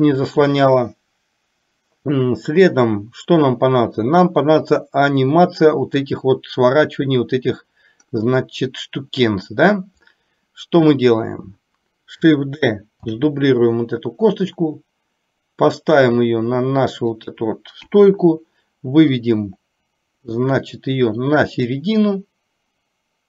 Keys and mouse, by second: 13.1 shift+d, 18.0 KP_1, 19.5-23.2 drag.